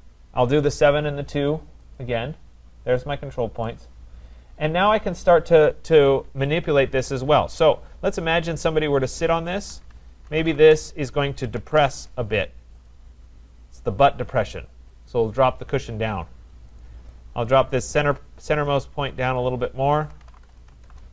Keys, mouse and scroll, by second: 1.9 click, 3.7 right click, 4.1-4.5 scroll, 6.6 click, 8.1 shift+click, 9.5 click, 10.1-12.1 typing, 12.9 click, 14.5-15.2 typing, 15.1 click, 16.8 click, 17.4 click, 18.1 click, 18.7 click, 19.4 click, 19.9-21.1 typing.